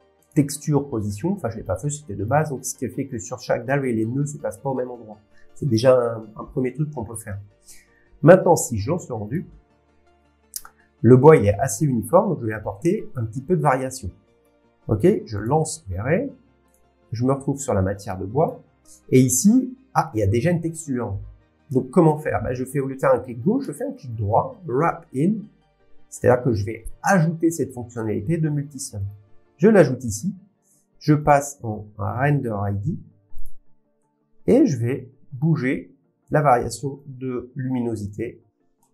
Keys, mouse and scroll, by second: 0.0 scroll, 0.2 click, 1.4-2.6 scroll, 3.4 scroll, 8.0-8.4 scroll, 9.3 click, 12.5 middle click, 15.4 click, 15.8 scroll, 16.7 click, 18.4 click, 23.0 click, 27.3-28.8 right drag, 29.1 click, 31.3 click, 33.4 click, 37.0 click.